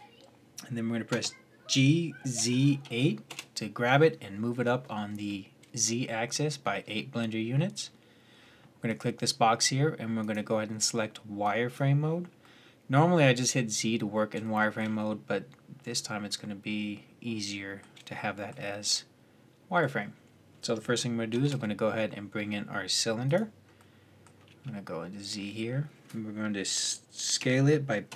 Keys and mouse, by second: 0.9 g, 8.7-12.3 drag, 12.3-15.3 middle drag, 16.9-18.8 middle drag, 21.1 shift+a, 24.2 z, 27.2 s.